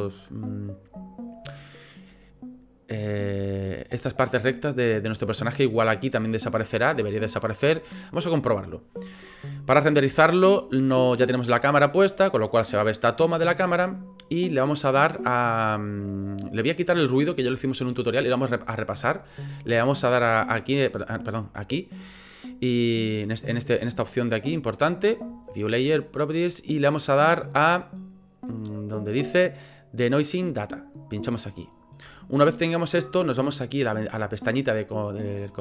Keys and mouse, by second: 19.2 click, 20.3 click, 21.6 click, 30.9 click.